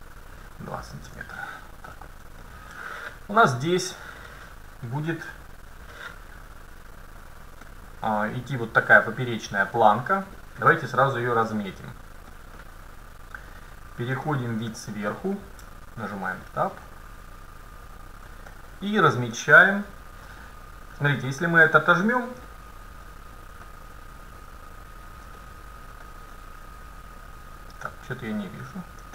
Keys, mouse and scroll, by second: 0.1 BackSpace, 2.6-4.5 middle drag, 7.7-9.6 middle drag, 10.4-12.3 middle drag, 12.3-12.7 scroll down 1, 12.7-14.4 middle drag, 14.4-14.7 scroll up 1, 14.7 KP_7, 15.7 Tab, 18.6 middle click, 19.7-20.5 scroll down 1, 20.5 middle click, 21.3-23.7 drag, 22.5-24.4 middle drag, 25.4-27.3 drag, 25.4-28.3 middle drag, 27.8-29.1 drag.